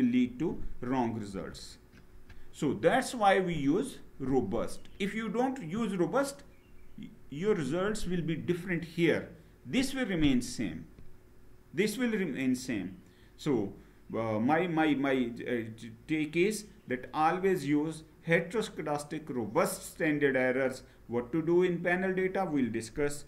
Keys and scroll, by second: 1.0 Down.